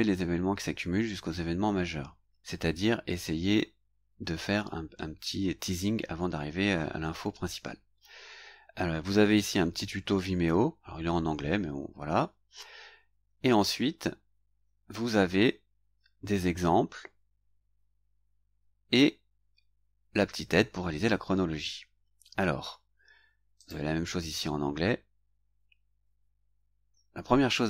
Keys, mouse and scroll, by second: 15.0-16.0 scroll down 4, 16.5 scroll down 2, 17.2 scroll down 2, 17.8 scroll down 2, 19.0 scroll down 2, 19.9 scroll up 2, 23.6 click, 24.3-25.7 scroll down 3, 25.9-26.3 scroll down 1.